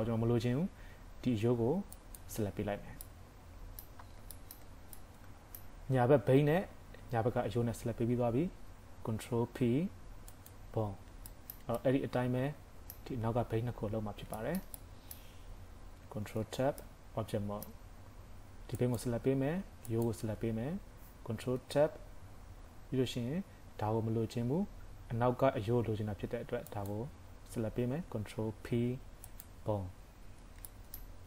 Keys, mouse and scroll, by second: 2.0 click, 3.0 middle click, 4.0 scroll up 3, 4.4 shift+middle click, 5.0 middle click, 8.0 scroll down 4, 9.4 ctrl+p, 11.0 scroll down 1, 11.3 shift+middle click, 11.8 middle click, 14.0 scroll up 2, 14.4 shift+middle click, 14.8 middle click, 16.2 ctrl+Tab, 16.8 middle click, 18.8 click, 19.9 shift+click, 21.5 ctrl+Tab, 26.8 click, 28.5 ctrl+p, 30.2 ctrl+Tab, 30.7 shift+middle click.